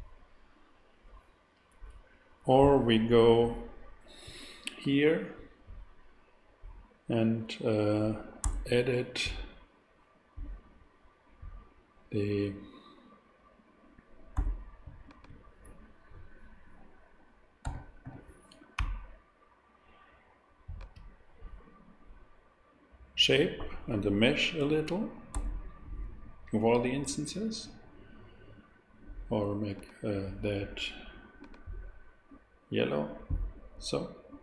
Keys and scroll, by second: 8.4 Tab, 14.3 a, 14.8 super+a, 17.6 g, 18.0 z, 18.8 ctrl+z, 25.3 Tab.